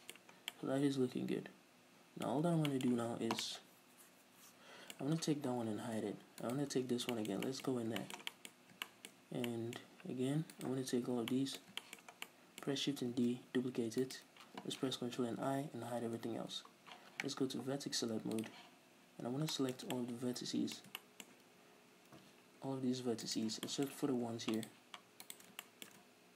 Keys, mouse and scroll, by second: 0.5 scroll down 2, 0.7-4.5 middle drag, 2.5-2.9 scroll up 2, 4.7-6.6 middle drag, 5.7 h, 6.6 right click, 6.9 Tab, 7.3 shift+middle click, 7.8-8.2 scroll up 2, 8.2-8.6 shift+middle drag, 8.7-9.0 scroll up 2, 9.0-10.7 shift+middle drag, 10.7 alt+right click, 11.1-11.5 scroll down 2, 11.5-12.2 middle drag, 12.3 scroll down 2, 12.4-14.3 middle drag, 13.3 shift+d, 14.3 right click, 15.6 ctrl+i, 16.3 h, 18.5 click, 19.7-23.4 shift+middle drag, 22.4 a, 22.7-23.4 scroll down 2, 23.4 shift+right click, 23.9 shift+middle click, 24.8 shift+right click, 25.4 shift+right click, 25.8 shift+middle click.